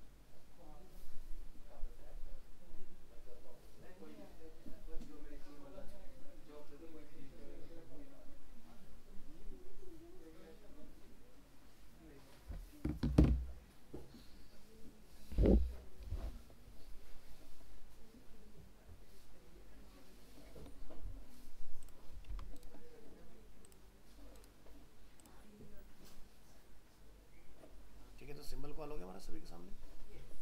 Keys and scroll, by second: 22.3 ctrl+s.